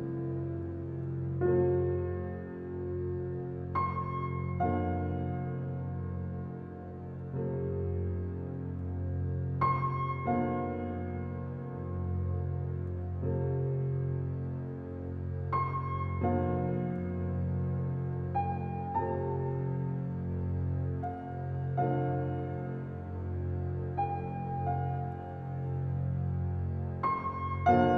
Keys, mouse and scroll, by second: 0.6 click, 1.2 ctrl+alt+scroll down 1, 1.7 ctrl+alt+scroll down 1, 4.6 ctrl+alt+scroll down 1, 5.9 ctrl+alt+scroll down 1, 7.7 ctrl+alt+scroll up 1, 8.4 ctrl+alt+scroll down 1, 10.4 shift+click, 11.6 click, 14.3 ctrl+alt+shift+e, 17.6 right click, 19.5 click, 23.4 c, 24.7-27.9 drag.